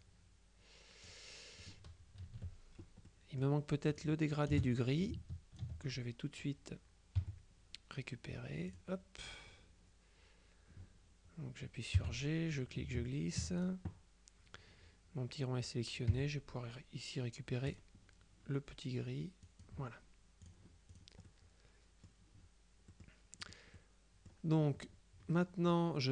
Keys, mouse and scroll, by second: 0.1-1.6 drag, 1.7 click, 2.3 KP_Subtract, 3.2-4.6 drag, 4.6 space, 7.2 F7, 8.8 click, 12.1 g, 12.6-14.2 ctrl+drag, 16.2 F7, 17.8 click, 19.5 click, 20.5 click, 23.0-24.1 middle drag.